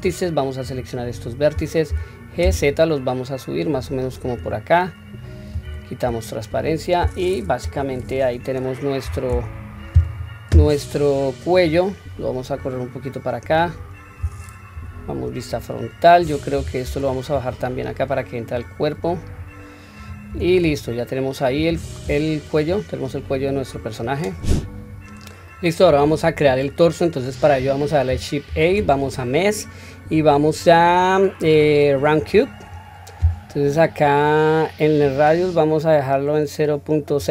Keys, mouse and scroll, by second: 0.0-0.6 drag, 1.9 g, 4.8-5.6 scroll down 1, 5.6-6.1 scroll down 1, 5.6 q, 6.1-7.3 middle drag, 7.6 KP_3, 8.1-8.6 scroll down 1, 9.0 a, 11.5 click, 12.5 click, 13.8-14.7 scroll down 1, 14.7 KP_1, 15.5-16.5 scroll up 1, 16.5 scroll up 1, 16.5 q, 16.9 click, 18.5 click, 20.3 Tab, 20.8 scroll down 1, 21.7-22.5 scroll down 1, 21.7 q, 22.5 click, 26.5 click, 28.5 shift+a, 35.0-37.2 drag.